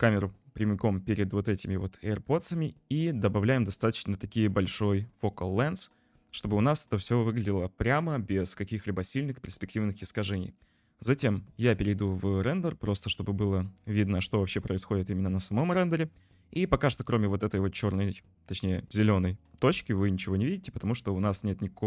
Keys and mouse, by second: 0.3 click, 11.4 z, 14.4 n, 21.2 click.